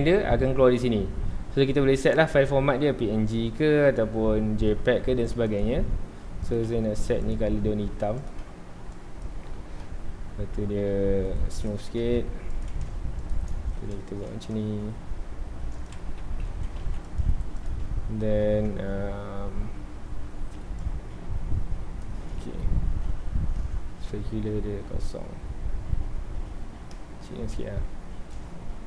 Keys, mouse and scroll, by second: 5.5 click, 6.4 click, 7.2-8.3 drag, 11.2 right click, 12.0 Tab, 12.4 2, 12.5 click, 13.2 click, 13.7 ctrl+b, 15.8 click, 15.9 alt+a, 16.2 Tab, 16.5 alt+a, 16.8 ctrl+s, 17.0 click, 17.3-20.3 right drag, 20.8-22.3 drag, 22.3-22.9 scroll up 1, 22.9 ctrl+s, 24.1-27.1 drag.